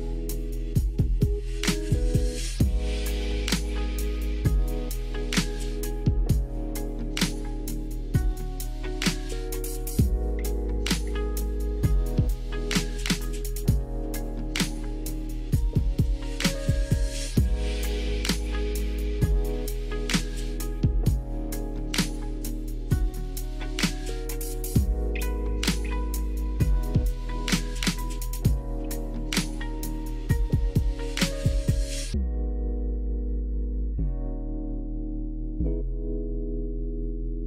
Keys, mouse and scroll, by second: 0.3 e, 1.2 r, 2.1 g, 3.4 click, 4.6 e, 5.4 r, 6.0 g, 8.1 e, 8.6 click, 9.2 click, 10.7-12.3 drag, 12.9 g, 13.3 click, 13.6 click, 13.8 g, 14.1 click, 14.3 click, 14.8 alt+z, 15.2 middle click, 17.3-18.4 drag, 18.4 KP_1, 18.8 alt+z, 20.2 click, 21.7 s, 22.0 x, 22.7 click, 23.0 Tab, 23.4 alt+z, 24.0-24.6 middle drag, 26.3 KP_3, 26.9 shift+middle click, 27.5 click, 27.7 Tab, 28.2 alt+z, 28.9 click, 30.3 click, 30.7-32.4 drag, 32.7 shift+middle click, 33.5 Tab, 34.1 alt+z, 34.4-34.8 middle drag, 35.2-35.6 middle drag.